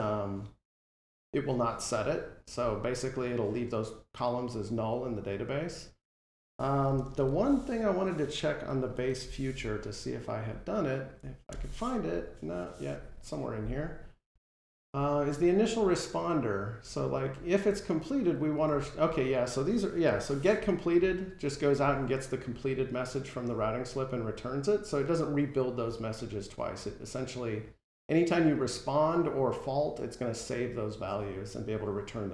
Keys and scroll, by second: 6.8 super+t, 19.9 F12.